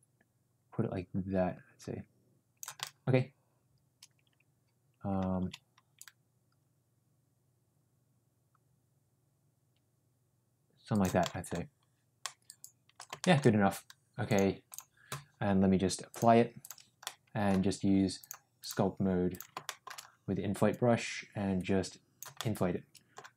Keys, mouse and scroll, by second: 2.7-5.1 middle drag, 5.7 ctrl+z, 5.9-11.0 drag, 11.2 middle drag, 12.2 middle click, 13.2 shift+middle click, 14.3 click, 16.2 click, 17.0 middle click, 18.2 click, 18.5 click, 19.6 shift+middle click, 20.6-22.2 drag, 22.4 middle click.